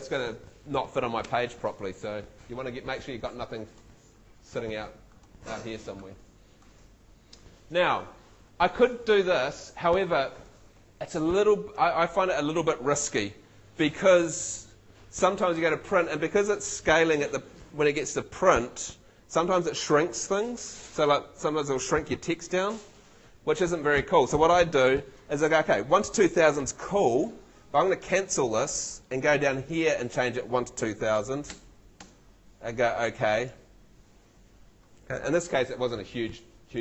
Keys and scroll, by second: 30.9 2, 31.2 0.